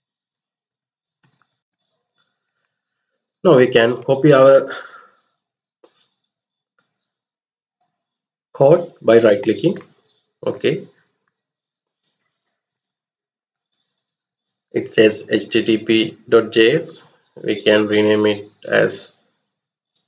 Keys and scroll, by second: 0.0-1.5 typing, 12.4 Left, 12.8 Up, 13.0 Left, 13.6-14.2 Up, 15.0 Right, 15.2 Right, 17.1 Delete, 17.3 Delete, 19.8-20.0 typing.